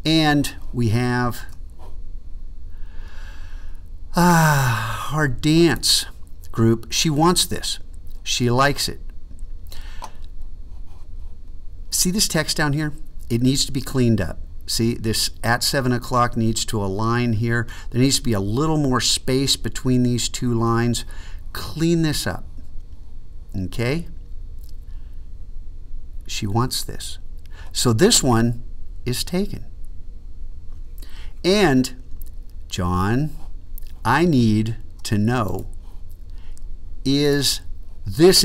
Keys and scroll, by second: 1.4 super+2.